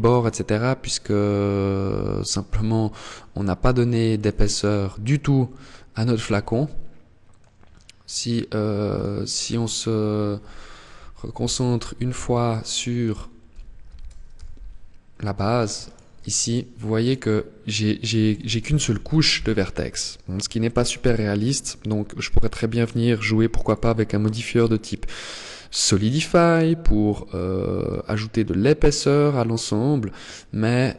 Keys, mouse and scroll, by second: 2.3 click, 5.4 Tab, 5.8 middle click, 8.1 right click, 10.1 ctrl+l, 11.3 h, 12.3 right click, 13.1 ctrl+l, 13.5 h, 15.0 alt+right click, 15.6 alt+right click, 16.1 alt+right click, 18.1 ctrl+l, 18.4-19.1 scroll up 1, 19.1 shift+middle click, 19.1-19.7 scroll up 1, 19.7 middle click, 21.5 click, 22.8 click, 27.1 click.